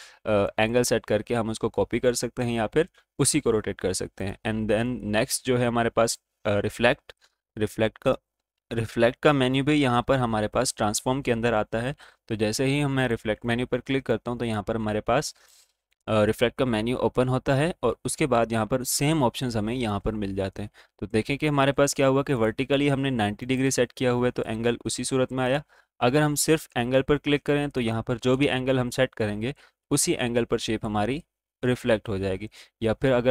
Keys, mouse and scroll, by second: 4.1 click, 4.8 right click, 5.9 click, 12.8-18.2 drag, 22.4 click, 25.9 click, 27.8 click, 28.6 Up.